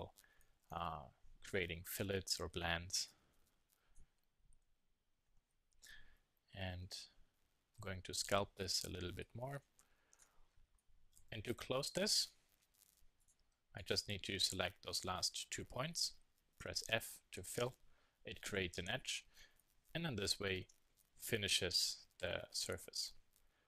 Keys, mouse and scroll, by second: 0.2 click, 0.8 s, 2.4-4.0 drag, 4.2-5.2 middle drag, 5.2 s, 6.4 click, 8.0 s, 9.4 e, 10.4 s, 11.6-13.0 drag, 13.3 click, 16.2 a, 21.0 f, 22.4-23.6 middle drag.